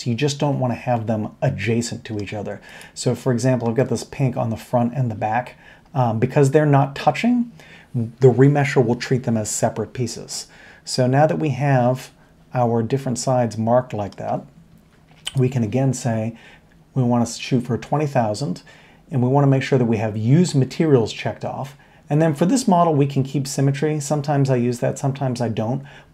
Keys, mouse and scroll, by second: 3.6 middle click, 3.8-4.5 middle drag, 12.3-14.2 middle drag, 14.7 Tab.